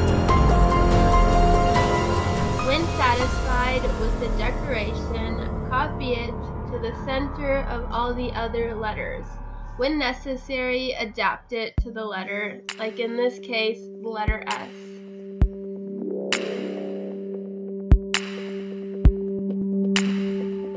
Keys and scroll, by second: 0.3 space, 1.9 space, 2.2 space, 4.5 ctrl+d, 4.5 space, 6.2 space, 7.6 space, 11.4 Delete, 11.6 space, 14.8 space, 16.0 Delete, 17.0 space, 18.7 space, 20.2 space, 20.4 space.